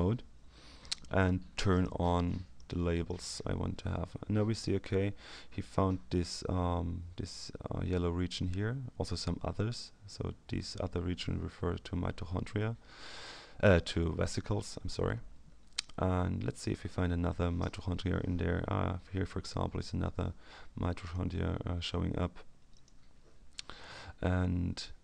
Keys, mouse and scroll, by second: 1.6 click, 2.5-3.6 drag, 11.0-11.5 scroll up 1, 12.4-13.7 scroll down 1, 13.8-14.4 scroll up 1, 14.4 scroll up 1, 14.6-15.2 scroll down 2, 15.2 scroll up 2, 15.4-16.7 scroll down 2, 16.7-17.0 scroll up 1, 17.0-18.5 scroll down 2, 21.0 click, 22.7 click, 24.6-25.0 scroll down 1.